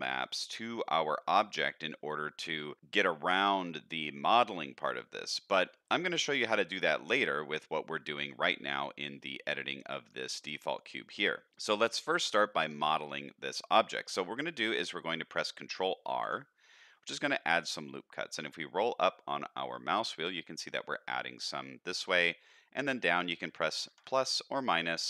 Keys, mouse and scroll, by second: 0.7-2.0 middle drag, 2.8 shift+middle click, 3.7 middle click, 4.8 middle click, 5.8 middle click, 6.4 middle click, 7.5 middle click, 8.5 middle click, 9.8-12.1 middle drag, 12.3 shift+middle click, 12.8 middle click, 14.7 middle click, 16.1 ctrl+r.